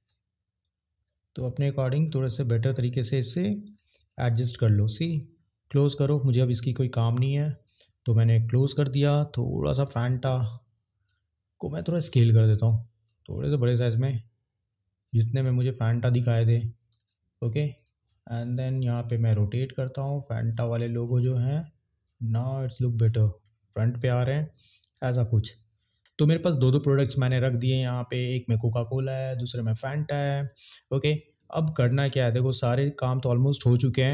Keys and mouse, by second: 0.6 click, 0.8 click, 3.6 click, 6.0 click, 9.7 click, 11.1 click, 17.7 click, 20.5 click, 31.9 click.